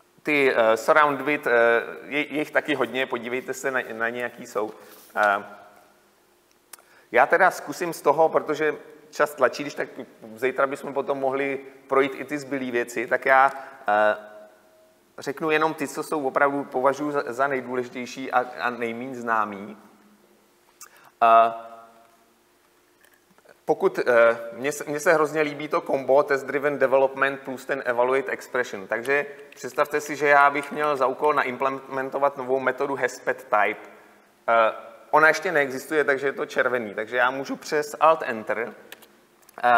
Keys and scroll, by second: 30.7 Delete, 39.0 alt+Return.